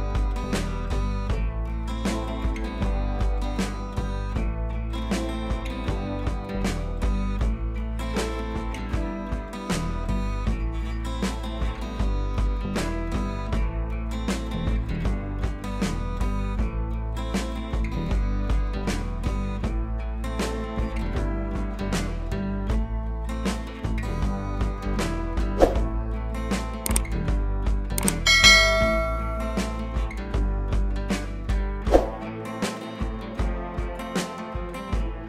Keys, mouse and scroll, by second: 2.0-3.2 drag, 5.1-6.9 scroll down 2, 7.6 click, 9.1-9.5 click, 10.2 click, 11.0-11.4 click, 11.6 ctrl+c, 12.2 t, 12.8-13.6 drag, 14.2 ctrl+v, 15.9 click, 16.3 ctrl+v, 17.6-18.5 drag, 25.6-27.5 drag, 30.3-30.8 scroll up 1, 31.7 ctrl+t, 32.0-34.3 alt+drag.